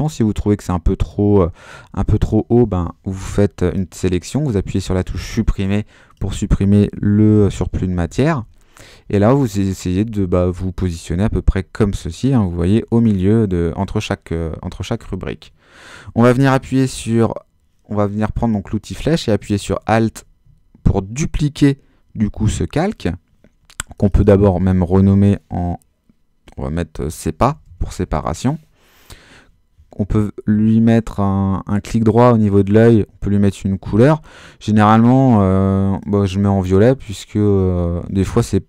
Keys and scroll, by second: 2.1 BackSpace, 7.9 Down, 8.3 Up, 9.1 Left, 10.0 Down, 10.2 Up, 11.0 super+Up, 11.2 super+-, 12.8 super++, 27.2-28.5 typing.